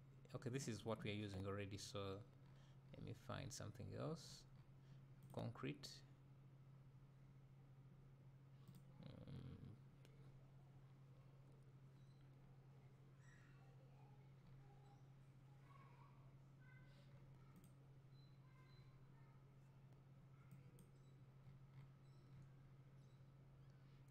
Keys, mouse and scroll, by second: 21.0-22.6 drag.